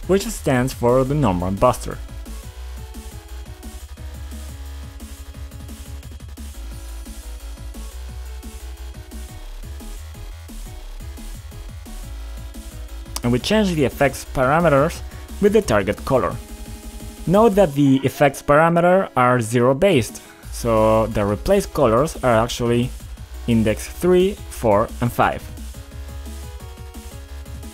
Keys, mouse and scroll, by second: 0.0-1.0 typing, 1.1 Return, 3.9 click, 7.0 click, 10.5 click, 12.2 click, 12.3 click, 13.6 click, 13.7 click, 14.5 click, 18.4 click, 19.2 click, 19.9 click, 20.2 click, 20.6 1, 21.4 click, 21.5 click, 22.0 click, 26.2 click.